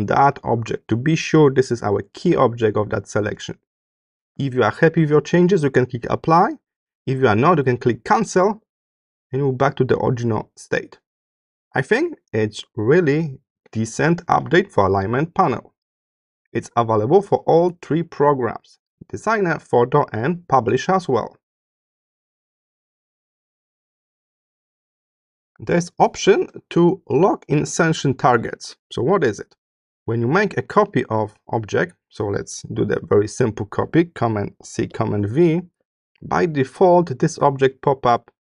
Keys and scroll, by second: 23.0 space, 24.7 space, 26.3 space, 34.6 super+c.